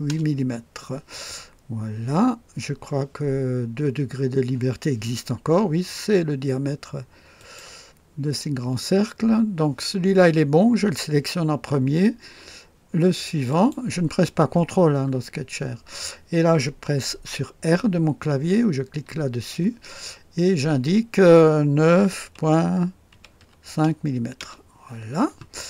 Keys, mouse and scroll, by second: 0.0 Return, 1.8 scroll up 1, 7.3 click, 13.5 click, 19.0 r, 22.0 KP_9, 23.1 KP_Decimal, 23.4 KP_5, 24.3 Return, 24.5 KP_Enter, 25.5-25.6 scroll down 2.